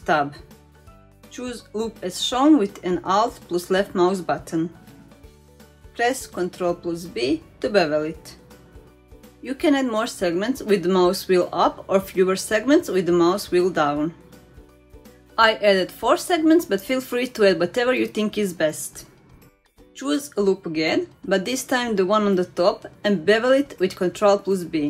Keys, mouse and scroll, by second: 0.1-1.2 scroll up 2, 2.2 alt+click, 5.1 ctrl+b, 17.5 shift+middle click, 18.7 middle click, 20.4 alt+click, 22.2 ctrl+b.